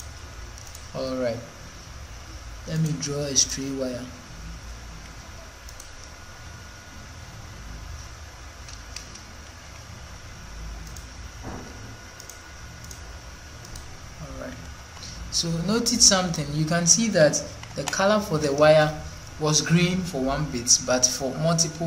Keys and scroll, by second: 6.4 Escape, 7.1 Escape, 9.4 ctrl+2, 14.8 ▯, 17.6 ▯.